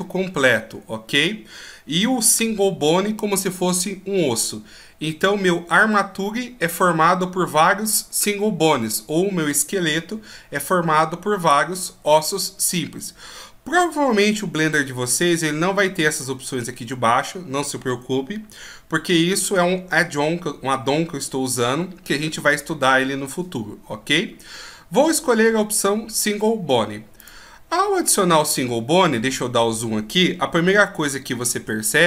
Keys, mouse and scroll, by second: 28.4 scroll up 2, 29.1-29.8 scroll up 6, 30.8-31.7 scroll up 2, 31.7-32.0 scroll up 1.